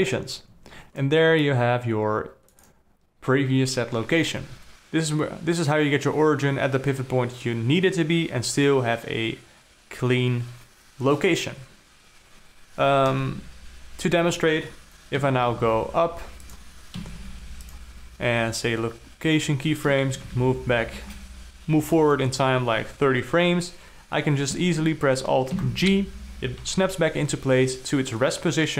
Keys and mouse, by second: 0.9 click, 2.0-3.2 drag, 13.6 KP_0, 15.7 g, 17.5 i, 20.7 shift+Up, 20.9 shift+Up, 21.2 shift+Up, 26.1 alt+g.